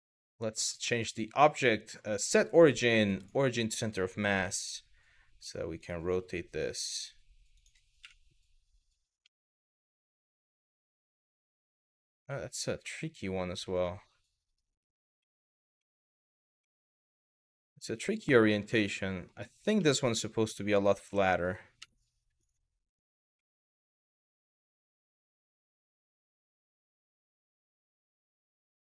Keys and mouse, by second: 0.7-2.9 drag, 3.9 r, 5.4 click, 5.8 g, 7.2 click, 7.6 KP_1, 9.0-14.2 middle drag, 14.8 middle click, 15.5 middle click, 16.2-16.9 middle drag, 17.2 e, 17.8-19.0 middle drag, 19.5 middle click, 20.6 r, 21.4 KP_3, 23.8 r, 26.0 click, 26.4 g, 28.6 click.